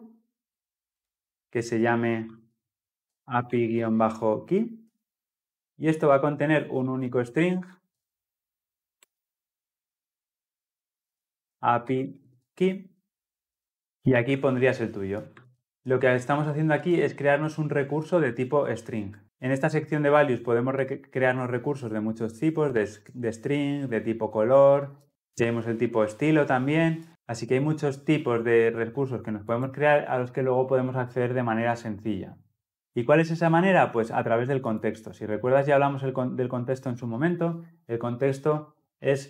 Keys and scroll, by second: 8.9 Return, 15.2 ctrl+c.